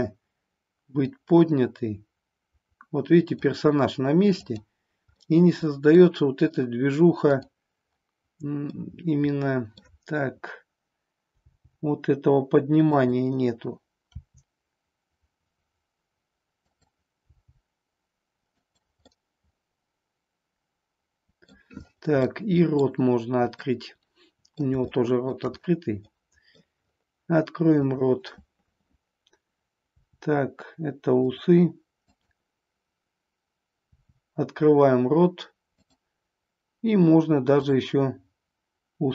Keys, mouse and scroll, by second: 1.0-3.4 drag, 4.4 click, 5.2 middle click, 7.4 click, 8.8-9.9 middle drag, 11.4 g, 13.0 click, 14.0 r, 17.2 g, 18.5 click, 19.0-21.5 middle drag, 22.4-22.9 middle drag, 23.7 scroll up 1, 23.8-24.7 middle drag, 24.9-25.4 shift+middle drag, 26.1-26.8 middle drag, 27.7 click, 29.8 r, 32.0-33.4 drag, 33.9 r, 35.9 click, 37.5-38.7 drag.